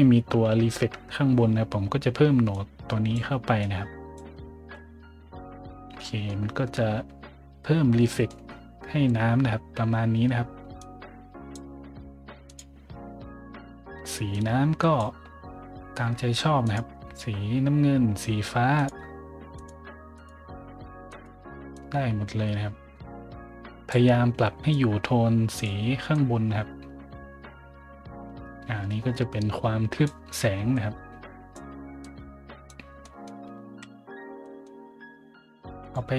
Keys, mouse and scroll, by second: 2.5-3.1 drag, 3.6-4.1 drag, 3.9 right click, 6.0 middle drag, 6.6 scroll up 1, 7.7 scroll up 1, 8.0 middle click, 10.8 click, 12.4 click, 14.3 click, 16.6 click, 18.7 click, 19.5 click, 20.1 click, 21.1 click, 21.1 right click, 21.7-22.8 right drag, 22.8-23.9 drag, 24.7-25.6 drag, 25.5 right click, 26.1-27.8 drag, 26.1-30.0 right drag, 29.9 click, 30.7 click, 30.7 right click, 32.0 click, 32.0 right click, 33.0 middle drag, 34.1 scroll down 1, 34.4 middle click, 35.8 click.